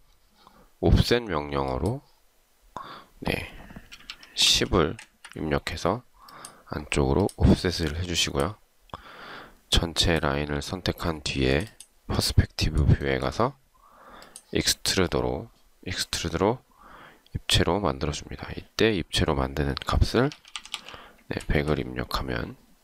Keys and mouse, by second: 4.0-4.8 typing, 5.1 Return, 13.2 shift+right click, 20.3-21.3 typing, 21.5 Return.